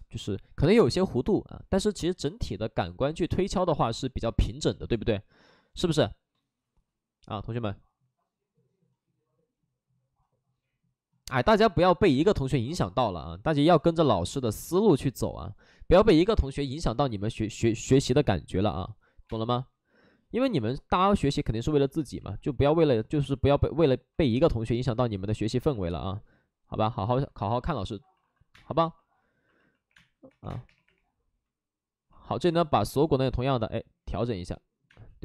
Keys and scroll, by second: 19.1 5, 19.2 space, 20.3 space, 21.1 space, 22.1 ctrl+z, 27.3 alt+s, 28.1 alt+s, 28.4 space, 29.8-30.6 typing, 32.3 space.